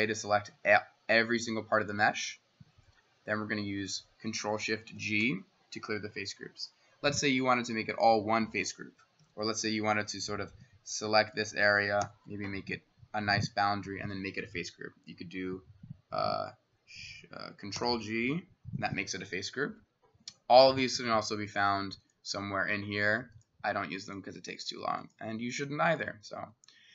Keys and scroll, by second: 4.9 ctrl+shift+g, 9.2 s, 11.8-12.8 typing, 17.8 ctrl+g, 26.4 Escape.